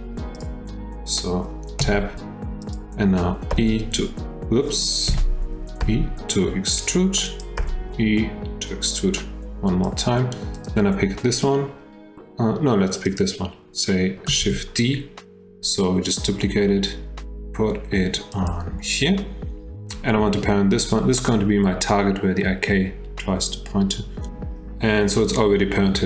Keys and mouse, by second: 0.3 click, 1.8 Tab, 2.6 click, 3.5 r, 5.1 F8, 5.8 e, 7.6 e, 10.6 click, 13.0 click, 14.4 shift+d.